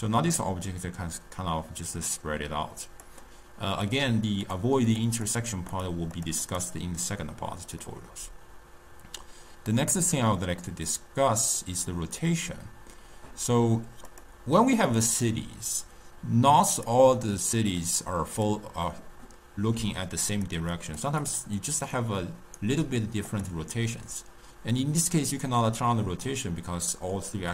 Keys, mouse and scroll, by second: 3.8 click, 4.3 click, 4.8 click, 5.2 click, 5.6 click, 6.1 drag, 6.3 click, 7.8-11.7 middle drag, 11.7 click, 14.0 click, 16.6 click, 17.6 click, 18.3 click, 19.7-22.6 typing, 20.0-20.4 drag, 20.6 click, 21.1 click, 21.9 right click, 23.2 click, 25.5-27.5 drag.